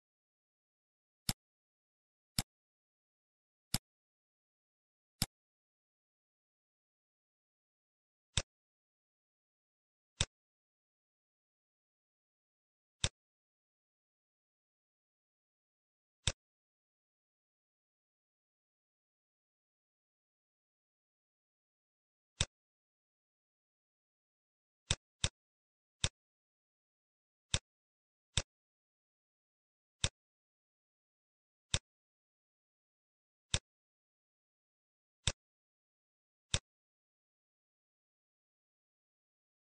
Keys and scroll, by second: 24.2 shift+d, 30.8 shift+d.